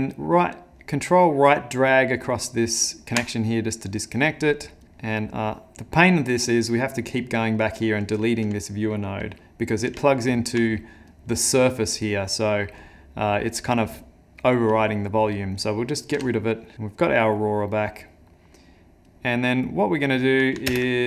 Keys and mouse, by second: 1.1 ctrl+right click, 4.9 middle click, 5.6 middle click, 6.0 middle click, 6.5 middle click, 7.2 click, 10.1 ctrl+middle click, 11.1 click, 12.2 middle click, 12.8 click, 15.6 click, 16.3 x, 16.7 middle click, 16.9 middle click, 17.6 middle click, 18.3 middle click, 19.1 click, 20.7 ctrl+space.